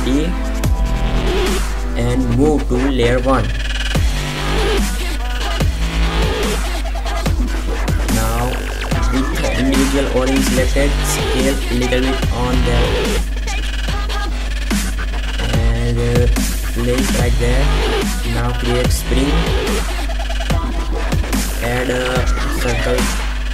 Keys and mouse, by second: 1.6 shift+d, 3.9 m, 7.0-8.2 drag, 11.1 s, 13.0 middle click, 13.3-15.2 middle drag, 15.2-16.2 drag, 17.4 middle click, 18.3 shift+a, 23.4 r.